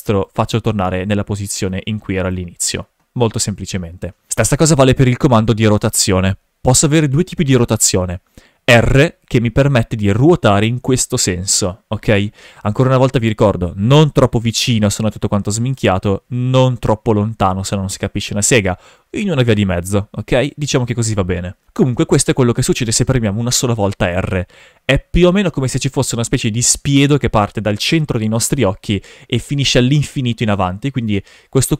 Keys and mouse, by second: 0.2 right click, 1.6 s, 2.2 right click, 4.3 shift+f, 9.2 r, 12.6 right click, 13.9 r, 15.7 right click, 16.4 r, 17.9 right drag, 19.3 r.